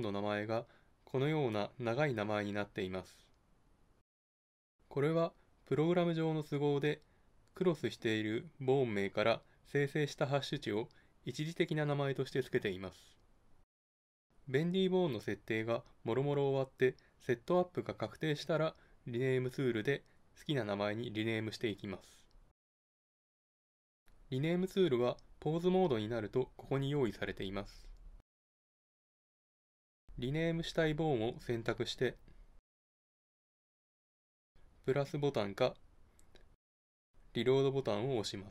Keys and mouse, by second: 24.7 Tab, 28.2-38.5 drag.